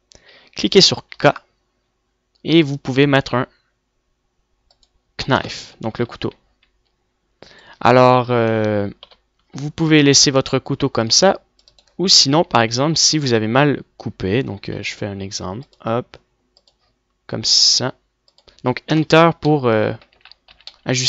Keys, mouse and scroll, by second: 0.6 a, 3.4 k, 7.5 z, 8.9 middle click, 9.6-11.5 typing, 14.2 a, 16.1 k.